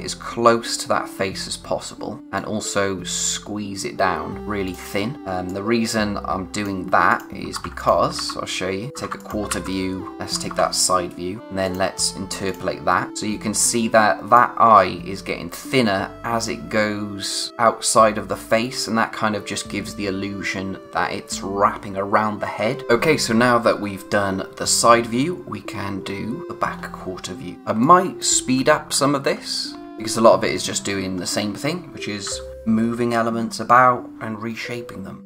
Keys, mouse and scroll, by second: 5.4 click, 7.5 ctrl+c, 7.7 click, 8.9 ctrl+c, 9.1 click, 9.6 v, 10.1 click, 10.4 ctrl+c, 11.4 v, 11.6 click, 23.8-24.3 scroll up 1, 27.5 space, 27.8 click, 28.5-29.8 scroll down 1, 31.2-32.6 scroll up 1.